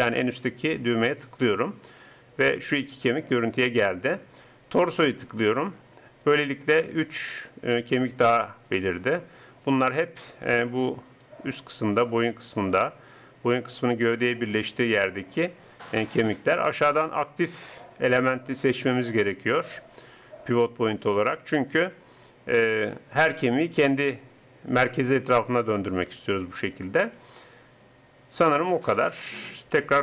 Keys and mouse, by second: 1.0-9.6 right drag, 10.6 r, 12.6 r, 16.7-18.6 drag, 23.2-25.6 right drag, 25.6 r, 29.8 n.